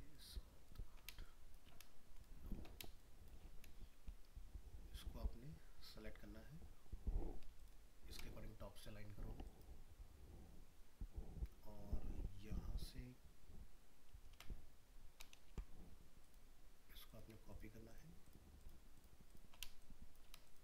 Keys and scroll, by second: 14.3 ctrl+x.